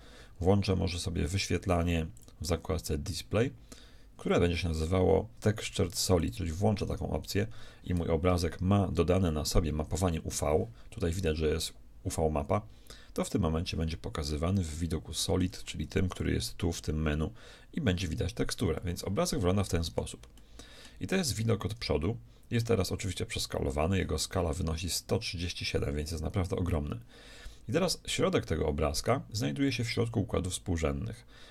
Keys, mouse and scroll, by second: 2.2-4.2 drag, 6.2-7.5 drag, 6.4 right click, 7.5 middle click, 14.7-16.0 middle drag, 16.1-18.0 shift+drag, 18.8-23.3 middle drag.